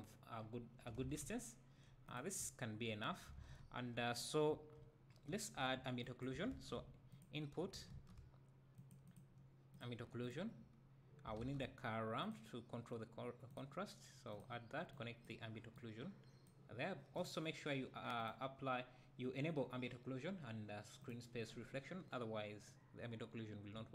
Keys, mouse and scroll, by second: 0.0-2.2 drag, 0.0-1.0 scroll up 2, 1.0 alt+a, 1.2 `, 2.4 `, 3.0-3.4 scroll up 2, 3.4 alt+a, 4.1 scroll up 2, 4.5 `, 6.0 click, 15.7-18.3 drag, 21.0 click.